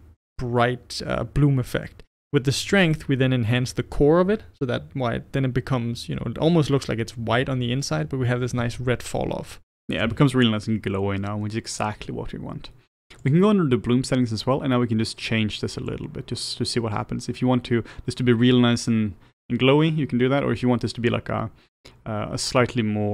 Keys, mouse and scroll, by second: 16.1-18.9 drag.